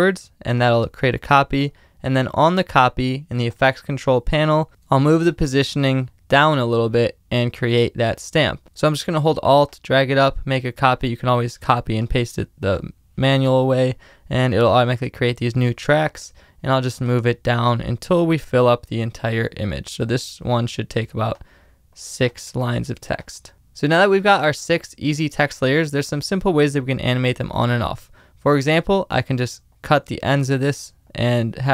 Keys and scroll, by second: 22.4 super+z, 23.3 space.